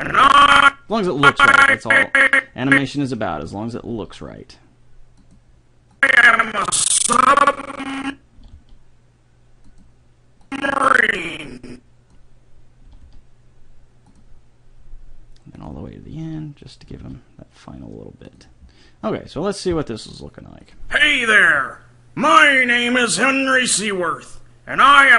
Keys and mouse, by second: 3.9 r, 5.1 click, 8.4 r, 10.5-12.2 drag, 12.9 r, 15.1 middle click, 15.6-17.4 drag, 16.1 r, 16.3 r, 16.9 r, 20.2 click, 21.6 a.